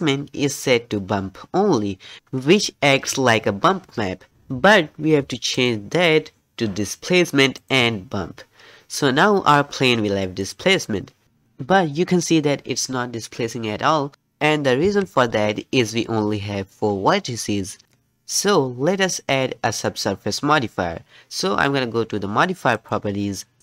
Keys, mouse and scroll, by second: 7.7-8.8 drag, 8.8 scroll down 1, 10.4 middle click, 10.4-10.9 scroll down 2, 14.9 Tab, 15.4-16.4 scroll down 2, 16.4-18.2 scroll down 1, 18.2-18.6 scroll up 3, 18.6 Tab.